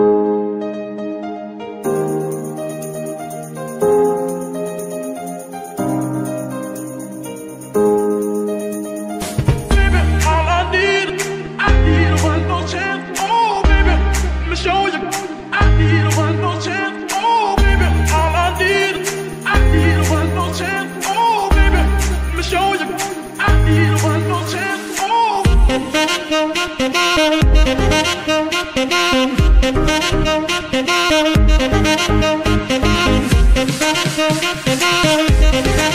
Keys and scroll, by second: 0.8 g, 1.0 x, 3.8 g, 4.0 x, 5.9 z, 7.7 KP_9, 7.7 KP_0, 7.8 Return, 25.3 ctrl+s, 30.2 KP_1, 34.3 shift+d.